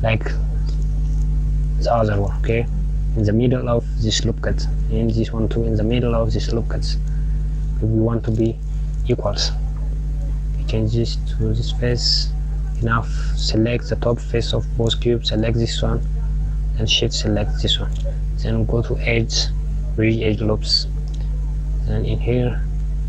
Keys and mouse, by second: 0.0 KP_1, 0.9 shift+d, 9.0 click, 10.8 click, 12.5 click, 13.4 KP_Subtract, 15.1 click, 17.6 shift+click, 20.0-22.5 drag.